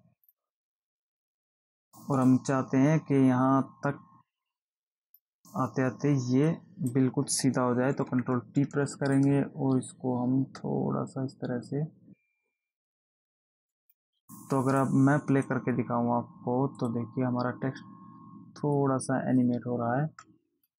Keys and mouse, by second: 0.5 click, 2.6 click, 6.9 click, 8.3 ctrl+t, 9.5 click, 13.9 Return, 15.1 click, 17.1 click.